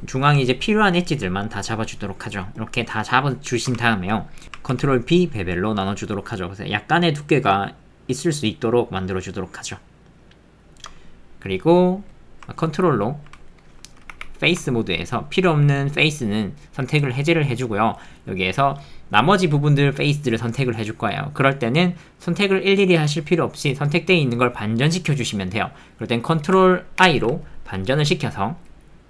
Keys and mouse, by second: 3.8 ctrl+middle click, 4.4 ctrl+z, 4.4 ctrl+b.